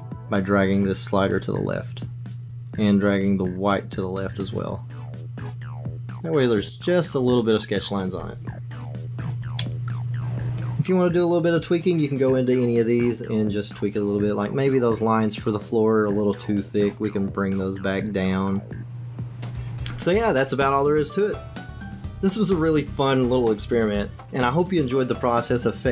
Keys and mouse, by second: 0.2-2.4 drag, 3.8-7.0 drag, 9.2 click, 16.9-19.7 drag, 22.2 ctrl+z, 22.5 shift+click, 22.7-23.4 typing, 23.1 ctrl+KP_Add, 23.2 ctrl+KP_Add, 23.2 ctrl+KP_Subtract, 23.6 Tab, 23.6 click, 23.7 Tab, 23.8 alt+click, 23.9 ctrl+z, 24.0 Tab, 24.0 shift+click, 24.1 Tab, 24.2 ctrl+e, 24.2 Tab, 24.2 click, 24.3 Tab, 24.4 Tab, 24.5-25.9 typing, 24.8 Tab, 24.8 alt+s, 25.0 Tab, 25.0 Tab, 25.1 Delete, 25.4 Delete.